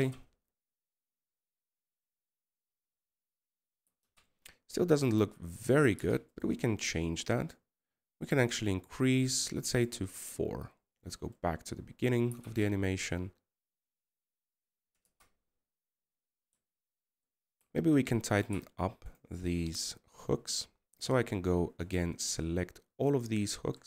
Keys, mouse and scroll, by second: 9.1-10.4 scroll down 13, 16.5 KP_0.